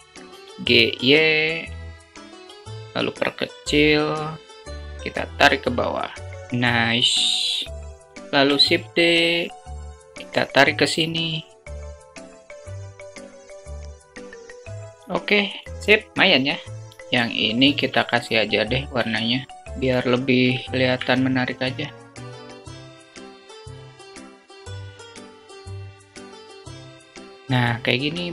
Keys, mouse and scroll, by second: 0.9 s, 6.1-6.7 scroll down 2, 7.5 shift+d, 13.0 s, 16.9 Tab, 17.5 alt+z, 19.6 3, 19.8 shift+click, 21.7 shift+click, 22.1 ctrl+z, 23.2 alt+shift+click, 23.3 ctrl+z, 23.7 alt+shift+click, 24.3 alt+shift+click, 24.8 shift+click, 24.8 alt+shift+click, 25.3 alt+shift+click, 26.7 Tab.